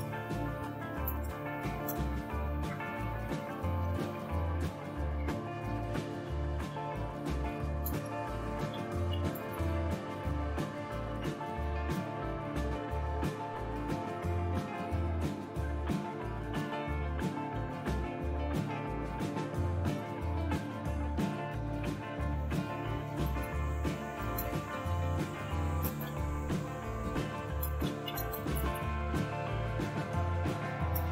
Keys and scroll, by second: 0.0-5.7 typing, 7.8-14.5 typing, 20.6 Return, 23.0-31.1 typing.